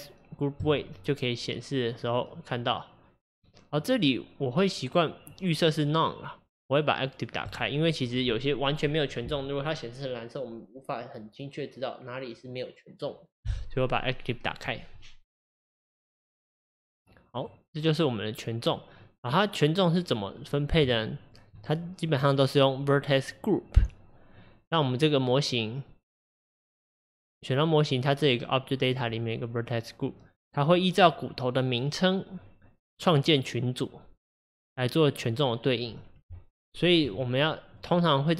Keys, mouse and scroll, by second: 3.4-6.4 drag, 17.4 click, 21.0-24.1 shift+middle drag, 32.4-35.6 scroll up 3, 36.2 Tab, 37.8 click.